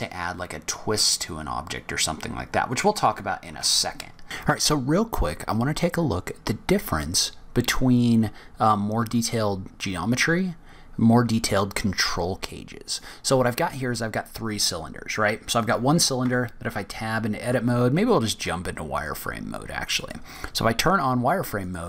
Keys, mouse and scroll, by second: 1.7-2.3 scroll down 3, 2.3-3.1 scroll up 3, 3.5 Tab, 4.0 scroll down 2.